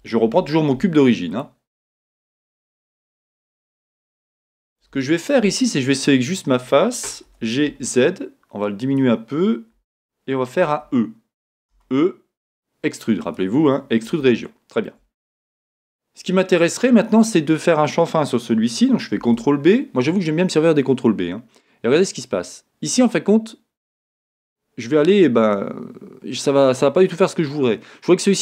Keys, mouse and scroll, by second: 0.2 shift+a, 1.8 middle click, 3.4-6.0 shift+middle drag, 4.4 Tab, 6.0 click, 7.4 g, 8.8 click, 9.8 g, 10.8 Escape, 13.2 e, 14.0 click, 14.2-28.4 shift+middle drag, 19.3 ctrl+b.